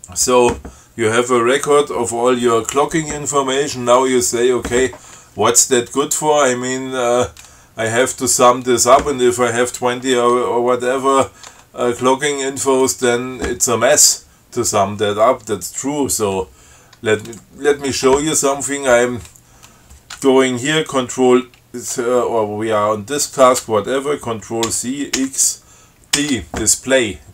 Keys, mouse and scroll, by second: 6.3 click, 11.4 click, 11.8 Tab, 13.1 click, 13.3 Tab, 17.5 click, 23.4 click, 24.9 ctrl+c, 25.4 ctrl+x, 26.4 ctrl+d.